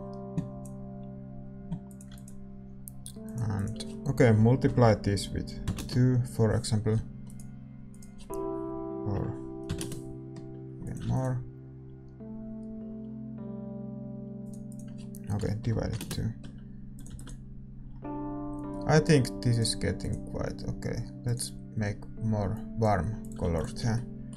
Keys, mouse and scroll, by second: 0.8-5.7 drag, 2.1 ctrl+s, 11.1 ctrl+s, 11.1-14.3 drag, 14.3-17.1 middle drag, 17.1 ctrl+s, 17.1-24.3 drag, 23.4 ctrl+s.